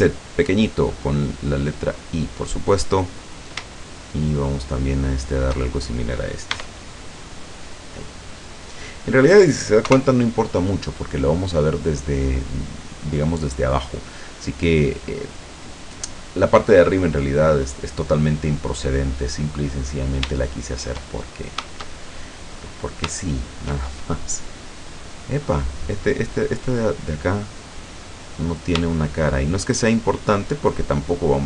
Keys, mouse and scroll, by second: 2.3 click, 3.4 right click, 3.8 shift+right click, 4.3 shift+right click, 4.7 shift+right click, 5.2 shift+right click, 6.6 e, 8.5 click, 9.0 scroll down 2, 9.9 KP_0, 16.9 middle click, 17.8 scroll down 2, 18.3-21.1 middle drag, 21.3-21.6 shift+scroll up 3, 21.7-22.6 shift+scroll down 4, 23.2-25.6 shift+middle drag, 27.6 click, 28.4 right click, 29.3 shift+right click, 30.3 shift+right click.